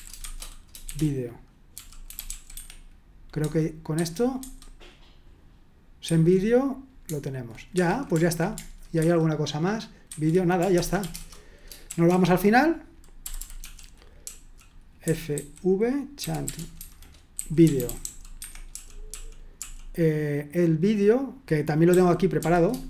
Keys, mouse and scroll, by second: 0.0-2.8 typing, 4.4 super+1, 6.1 super+1, 7.7 Escape, 9.0 super+2, 11.1 super+1, 13.0-19.5 typing, 21.6-22.8 typing.